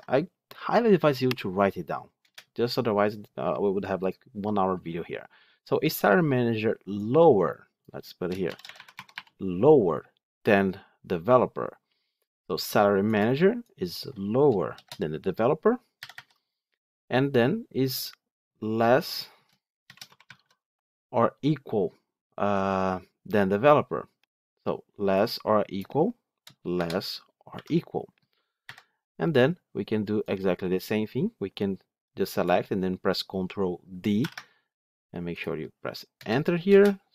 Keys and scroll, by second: 16.4 Delete, 28.6 Delete, 34.1 ctrl+d.